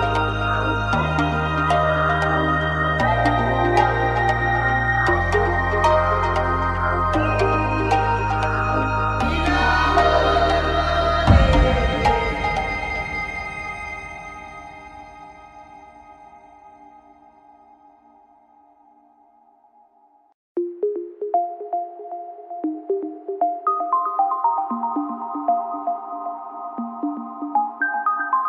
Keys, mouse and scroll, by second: 0.8 middle click, 1.9-3.1 middle drag, 9.8 a, 10.3 w, 11.3 a, 11.8 click, 13.1 click, 13.3 right click, 13.9 w, 14.3 a, 15.2 middle click, 16.2 middle click, 17.1-19.3 right drag, 23.2-24.6 middle drag, 24.8 w, 25.4 a, 25.6 middle click, 26.3 click, 26.9 w, 27.9 a.